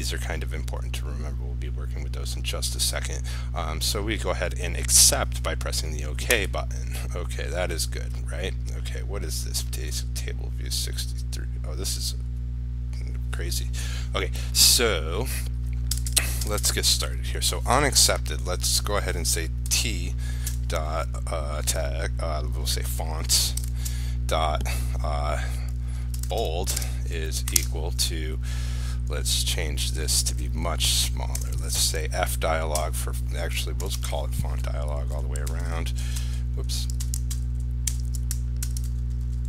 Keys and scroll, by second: 38.8 ctrl+c.